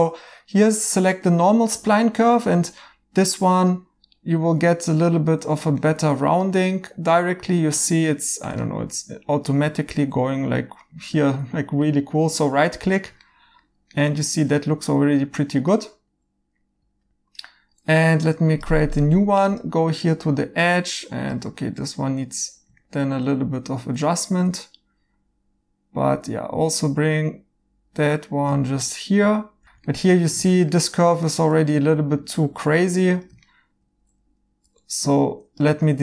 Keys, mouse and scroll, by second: 5.8 right click, 8.6 right click, 11.8 right click, 13.2 right click, 15.1 1, 22.8 right click, 29.0 right click, 29.6 1, 29.6 ctrl+z, 29.8 right click, 33.4 right click, 34.6 2, 35.6 x.